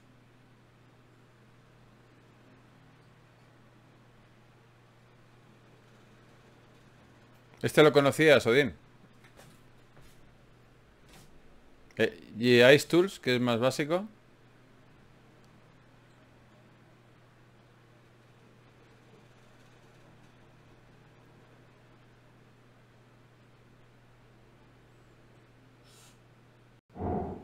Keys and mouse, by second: 9.8-15.9 middle drag, 24.6-26.7 middle drag.